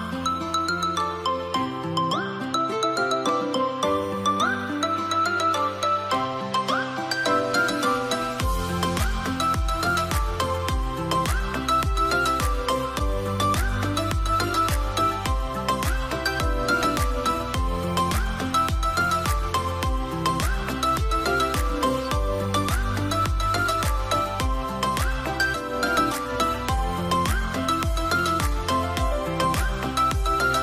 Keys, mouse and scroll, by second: 13.6 scroll up 1, 13.9 0, 15.0 BackSpace, 15.3 Return, 21.2 Return, 29.6 Return.